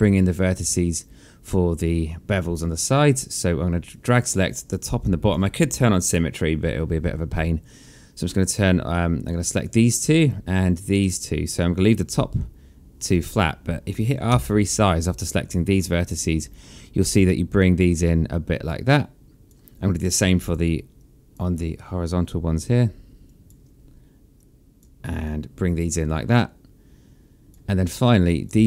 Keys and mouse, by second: 1.0 shift+click, 3.9 shift+click, 8.9 click, 10.3 shift+click, 14.3 r, 16.5 click, 20.0 click, 20.9 shift+click, 23.2 shift+click, 24.3 shift+click, 25.0 r, 25.6 click, 28.0 click.